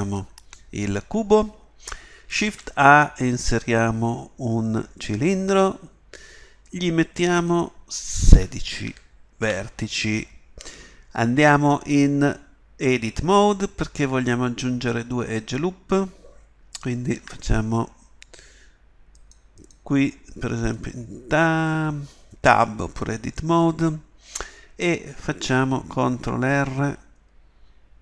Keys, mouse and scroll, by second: 2.4 shift+a, 7.3-10.6 drag, 19.5-21.2 drag, 26.0 ctrl+r.